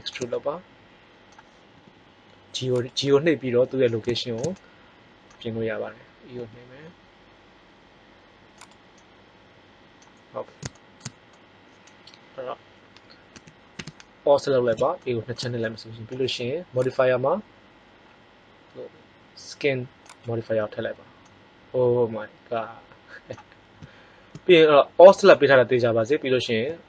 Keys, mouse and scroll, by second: 1.7 g, 6.3 e, 10.7 middle click, 13.3 a, 13.7 a, 14.9-16.3 middle drag.